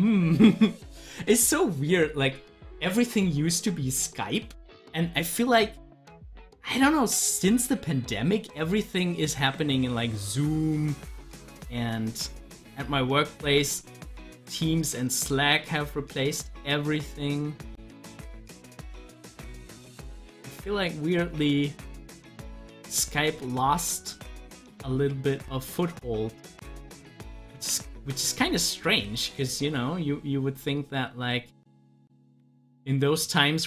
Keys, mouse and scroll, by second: 4.2-11.3 drag, 13.5 ctrl+z, 21.9 ctrl+z, 28.0 ctrl+z, 29.4-33.6 drag.